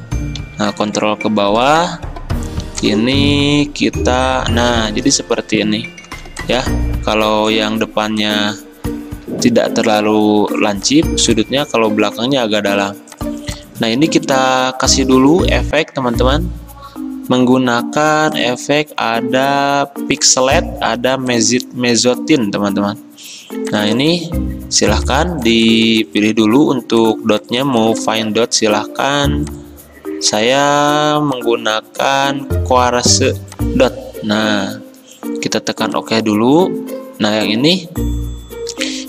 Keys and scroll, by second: 0.5 ctrl+[, 6.1 v, 9.3 ctrl+z, 12.8 ctrl+z.